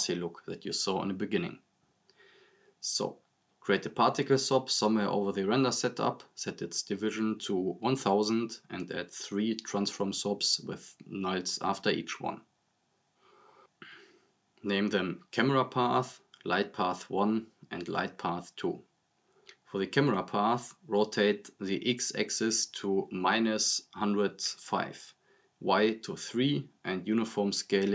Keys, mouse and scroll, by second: 1.0-2.2 typing, 3.5 click, 7.7 click, 9.2 scroll up 1, 9.6 right click, 9.7-12.3 typing, 10.7 click, 11.4 right click, 12.2 click, 12.7 right click, 13.2 ctrl+c, 13.3 ctrl+v, 14.2 click, 14.9-19.9 typing, 16.3 click, 18.1 click, 20.7 click, 25.9-26.5 drag.